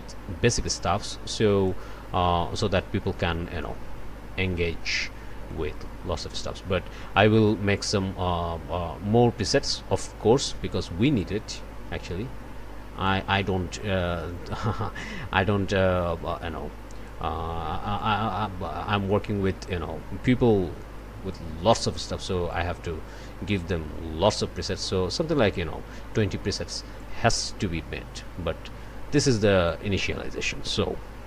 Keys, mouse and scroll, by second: 3.6 click, 4.5-5.5 scroll up 3, 5.5 click, 6.0 scroll up 1, 7.7-11.4 drag, 13.0-17.3 drag, 18.0-21.5 drag, 22.5-26.3 drag, 27.0-29.9 drag.